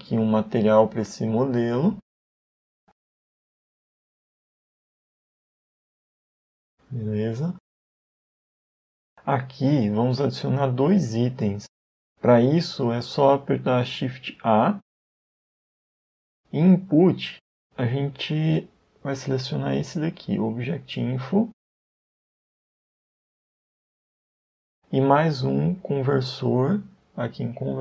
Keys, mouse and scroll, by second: 1.2 click, 2.8 click, 7.8 n, 8.4-9.5 scroll down 4, 8.7 middle click, 13.1 middle click, 14.6 shift+a, 24.7 shift+a.